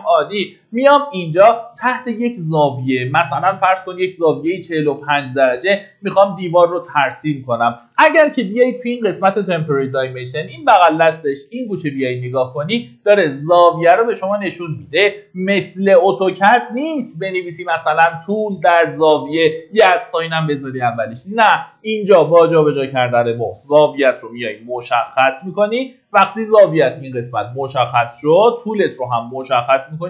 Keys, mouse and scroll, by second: 0.6 middle click, 1.9-2.4 scroll down 1, 8.6 ctrl+shift+d, 29.1 click.